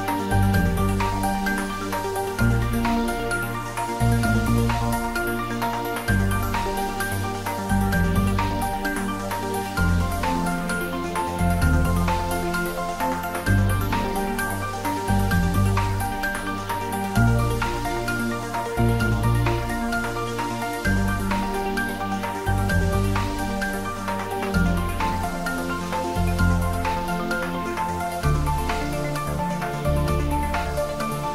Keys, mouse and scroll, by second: 0.2 shift+middle click, 0.9 g, 1.7 click, 2.2 click, 2.6 ctrl+s, 2.9 ctrl+middle click, 3.7-5.7 ctrl+middle drag, 5.7 click, 7.3-8.6 ctrl+middle drag, 8.6 shift+z, 9.7 shift+click, 9.7 shift+click, 10.3 ctrl+z, 11.7-12.7 typing, 13.3 click, 16.0 click, 16.5 shift+middle click, 17.3-19.5 typing, 19.1 click, 22.6 click, 23.1 shift+middle click, 23.6 r, 24.8 Left, 25.3 Left, 28.2 Right, 28.6 click, 28.9-31.2 typing, 30.2 click.